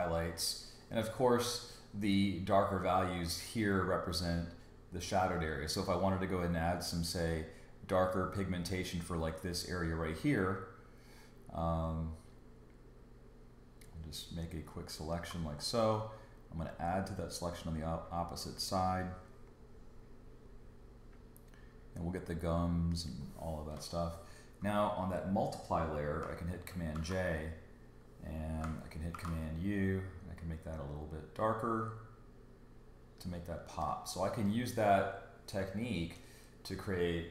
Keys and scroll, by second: 26.9 super+j, 29.1 super+u.